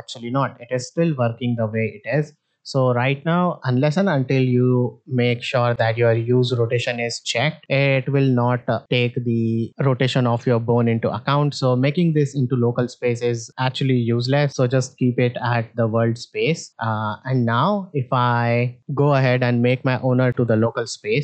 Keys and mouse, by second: 2.0 click, 11.6-14.5 drag, 18.3 click, 18.7 click, 19.7-20.8 drag.